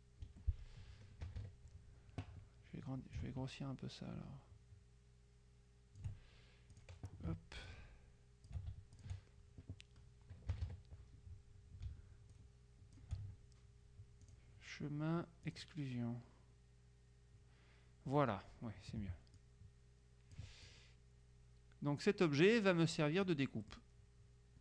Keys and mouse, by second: 0.4 F1, 1.4 KP_Subtract, 3.3-6.6 ctrl+drag, 6.8 click, 7.8-9.1 ctrl+shift+drag, 10.6 KP_Subtract, 12.4-13.6 ctrl+shift+drag, 14.4 click, 15.6 click, 19.4-21.0 ctrl+drag, 23.7 click.